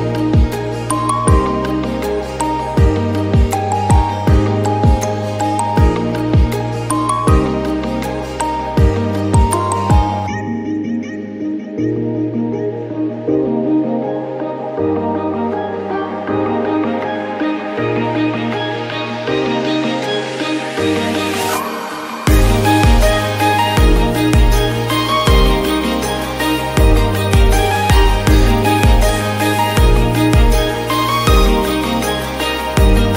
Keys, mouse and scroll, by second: 3.1-3.8 scroll up 20, 3.8 click, 4.4 click, 4.9 shift+click, 5.6 ctrl+p, 6.5-7.1 scroll down 14, 7.1-7.4 shift+middle drag, 7.4-8.1 scroll up 12, 8.1 drag, 8.7 shift+click, 9.3 ctrl+p, 10.3 scroll down 1, 10.5 drag, 11.1 click, 11.6 shift+click, 12.5-13.5 drag, 13.5-14.0 scroll down 11, 14.0 shift+middle click, 14.9-17.6 drag, 17.6 middle click, 18.1-18.6 scroll down 9, 18.6-19.0 scroll up 6, 19.0 shift+middle click, 19.4-19.9 scroll up 4, 19.9 click, 20.2-20.6 scroll down 3, 20.6 middle click, 21.2-21.6 scroll up 6, 21.6 shift+middle click, 22.1-22.9 scroll up 1, 22.9 click, 24.4 drag, 24.7-25.3 scroll up 1, 25.3 shift+click, 26.1 ctrl+p, 27.5 drag, 28.3 shift+drag, 29.0 ctrl+p, 29.9 click, 30.4 click, 31.0 shift+click, 31.9-33.1 drag.